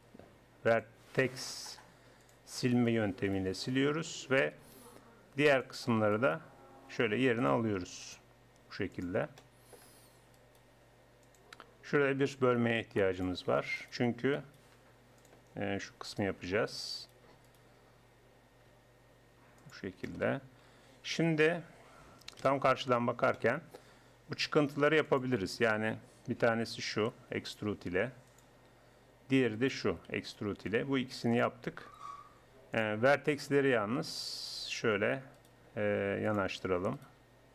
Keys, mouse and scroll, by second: 1.5-3.0 drag, 3.0-8.0 right drag, 8.1 right click, 9.4 right click, 10.4 right click, 11.2 click, 11.4-12.4 right drag, 12.4 ctrl+r, 14.4-16.2 drag, 16.2 right click, 18.6 g, 22.4 KP_1, 25.8-27.0 drag, 25.8-26.8 middle drag, 26.8 e, 27.0 right click, 27.4 click, 29.6-31.3 drag, 30.1 e, 32.8 click, 33.4-34.4 middle drag, 34.2 g, 34.4 click, 35.4-37.5 drag, 35.6 g, 37.2 g.